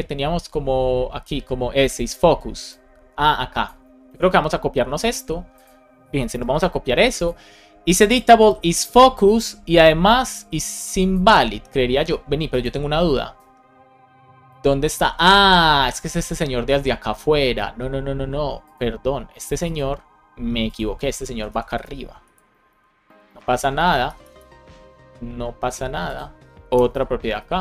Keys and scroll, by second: 4.0 super+c, 6.1 Return, 6.4 super+v, 11.8 super+s, 21.1 shift+super+Right, 21.4 shift+Left, 22.6 super+x, 23.0 Right, 23.5 BackSpace, 24.3 BackSpace, 26.6 Return, 26.8 super+v, 27.3 super+s.